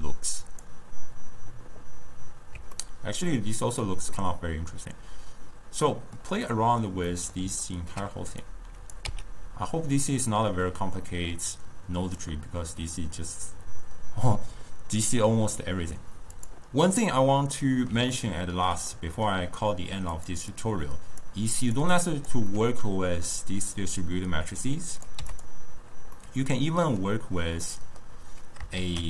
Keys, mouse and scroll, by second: 0.6-2.9 drag, 2.9-8.6 ctrl+middle drag, 8.6 click, 10.6 x, 11.2-14.3 middle drag, 17.6-20.2 middle drag, 20.2 click, 20.6-21.8 drag, 22.0-22.5 drag, 22.5-25.0 middle drag, 25.0 click, 26.2-28.8 middle drag, 28.8 shift+a.